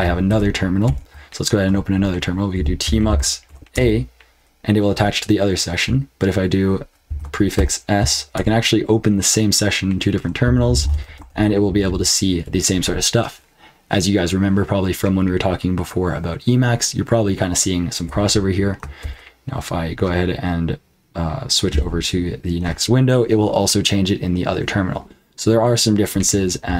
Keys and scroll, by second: 0.3 ctrl+Return, 0.8 super+Return, 2.3-3.9 typing, 7.0 ctrl+b, 7.3-8.0 typing, 8.3 Return, 10.2-12.9 typing, 19.0 ctrl+b, 21.7 n.